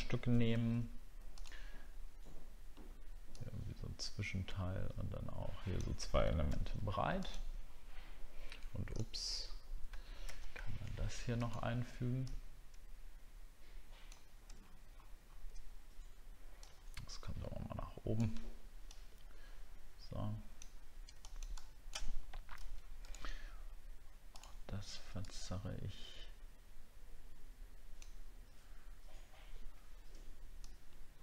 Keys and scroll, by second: 9.8 ctrl+c, 14.6 alt+scroll up 1, 15.2 alt+scroll up 1.